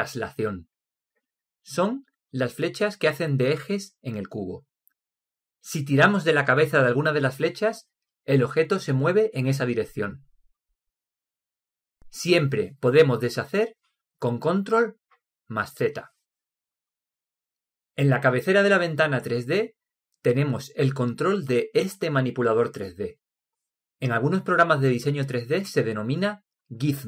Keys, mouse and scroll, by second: 6.9 click, 9.3 click, 16.3 ctrl+z.